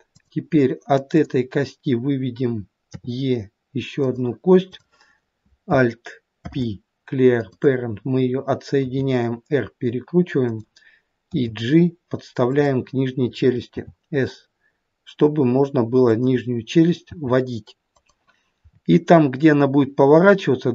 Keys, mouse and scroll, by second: 0.1 click, 1.1 click, 2.9 e, 4.7 click, 6.4 alt+p, 8.8 r, 11.3 g, 13.8 s, 17.1 g, 18.7-20.2 scroll up 2, 20.2-20.7 scroll up 1.